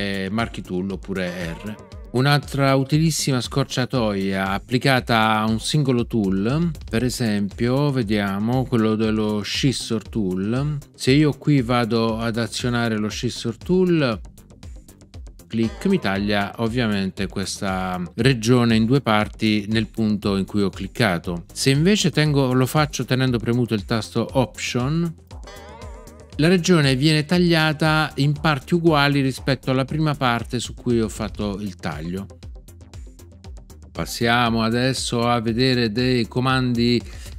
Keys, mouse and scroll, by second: 1.2 r, 15.6 click, 25.4 alt+click.